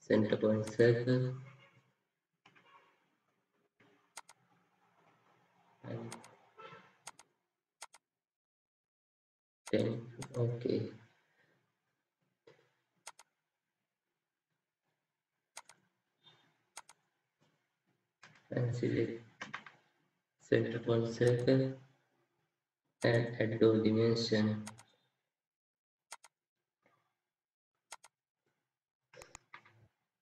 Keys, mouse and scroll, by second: 2.4 Escape, 3.6 Escape, 18.2 Escape, 19.3 Escape, 29.3 Escape, 30.0 Escape.